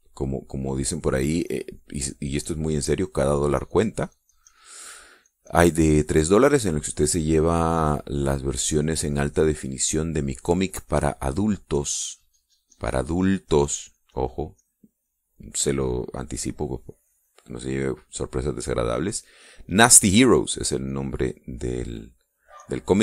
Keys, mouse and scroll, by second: 0.1-7.4 drag, 8.1 click, 8.6-12.0 drag, 12.3-18.3 drag, 19.5-21.4 drag, 21.7 click, 22.0 click.